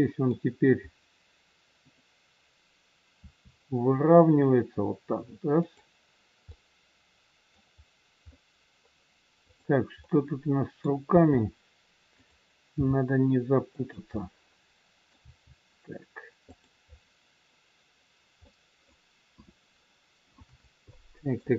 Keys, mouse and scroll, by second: 0.8-1.3 scroll down 1, 3.1 r, 6.4 middle click, 7.7-8.3 scroll up 2, 8.3 middle click, 9.4 click, 10.3 middle click, 11.2 r, 12.7 g, 14.0 middle click, 15.2 g, 17.0 scroll down 2, 18.5 middle click, 19.3 KP_1, 19.7 scroll up 3, 20.8 shift+middle click.